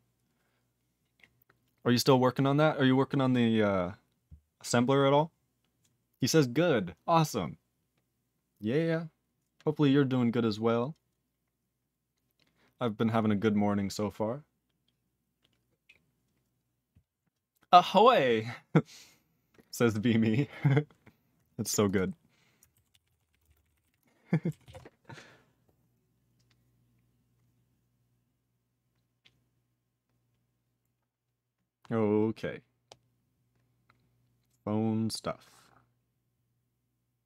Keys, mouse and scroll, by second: 21.8 click, 21.9 click, 22.9 ctrl+s, 23.0 ctrl+p, 23.1 ctrl+a, 23.2 ctrl+p, 23.3 ctrl+p, 23.4 ctrl+space, 23.4 ctrl+e, 23.5 ctrl+n, 23.6 ctrl+n, 23.6 ctrl+e, 23.7 ctrl+n, 23.8 ctrl+g, 23.9 ctrl+e, 24.6 ctrl+s.